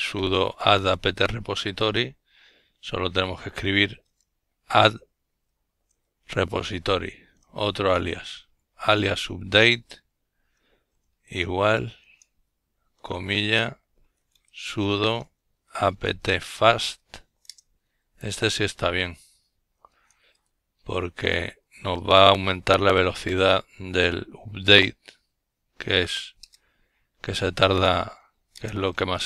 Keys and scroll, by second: 2.1-4.6 typing, 6.5 typing, 8.5-18.1 typing, 20.3 ', 22.1 Return, 22.6 typing, 24.1-26.3 typing, 28.1-29.2 typing.